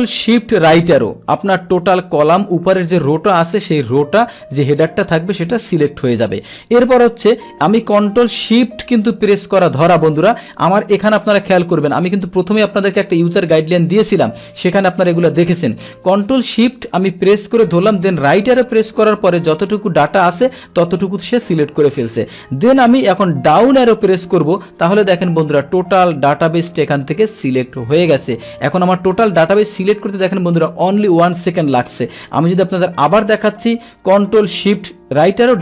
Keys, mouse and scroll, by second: 0.6 ctrl+shift+Right, 24.0 ctrl+shift+Down, 26.1 scroll down 2, 32.6 ctrl+Home, 35.1 ctrl+shift+Right, 35.4 ctrl+shift+Down.